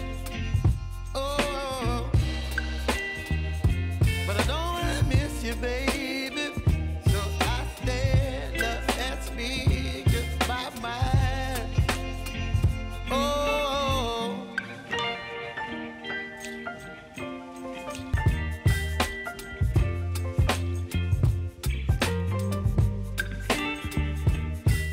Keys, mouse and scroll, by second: 18.0 -, 18.2-24.9 drag.